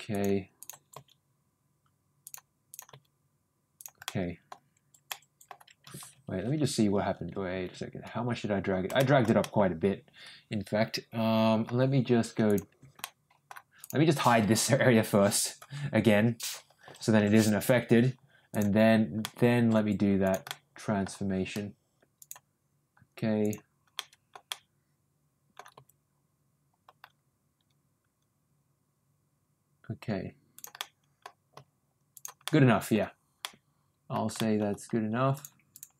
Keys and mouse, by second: 0.6 click, 0.9 g, 2.7 click, 2.9 g, 4.0 middle click, 5.0 middle click, 8.9 ctrl+shift+middle click, 9.4-11.6 ctrl+middle drag, 12.4 click, 13.0 middle click, 13.8 click, 14.6 l, 16.8 l, 17.1 h, 18.5 click, 19.2 middle click, 20.2 click, 20.4 middle click, 22.1 shift+click, 23.4 shift+click, 23.9 shift+middle click, 24.5-25.5 middle drag, 25.7 g, 30.7 middle click, 31.5 g, 32.4 middle click, 33.4 middle click, 34.3 middle click, 35.3 click, 35.7 click.